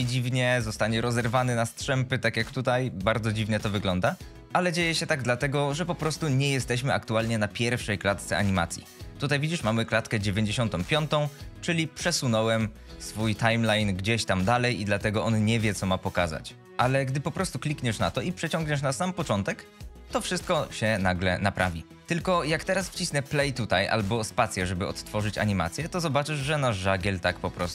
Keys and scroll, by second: 22.0 space.